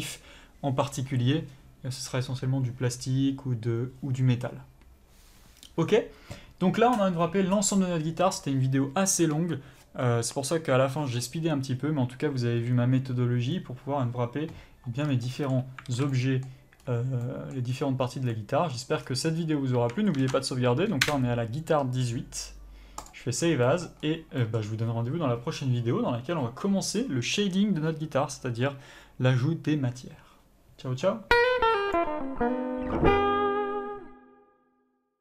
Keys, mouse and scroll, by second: 15.0 scroll down 1, 16.8-17.2 scroll up 2, 19.0-20.1 scroll down 2, 20.1 scroll down 1, 23.1 click, 23.7-32.0 middle drag, 24.0-24.4 scroll up 2.